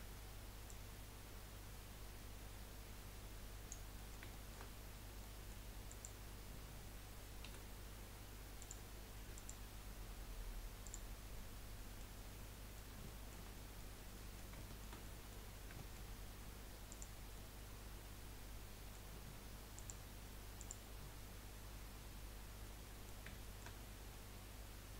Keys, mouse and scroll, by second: 0.7 click, 4.0 middle click, 4.8-5.2 scroll up 3, 5.2 middle click, 5.9 click, 7.4 Delete, 9.3 click, 10.1 Delete, 11.3 scroll up 1, 11.5 middle click, 12.2 scroll down 4, 12.5-15.7 middle drag, 15.7-16.2 scroll up 2, 15.9 shift+middle click, 16.9 click, 17.5-19.8 middle drag, 19.8 click, 20.6 click, 22.2-22.6 scroll down 5, 22.6-23.8 middle drag, 23.8-24.1 scroll up 1, 24.1-24.9 middle drag.